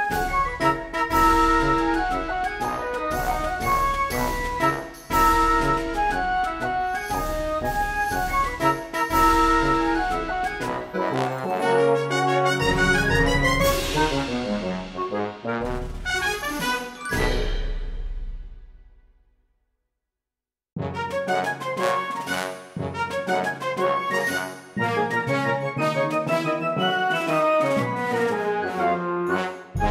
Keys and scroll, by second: 0.0-0.7 typing, 6.0 space, 6.1 s, 6.8 ctrl+z, 7.5 p.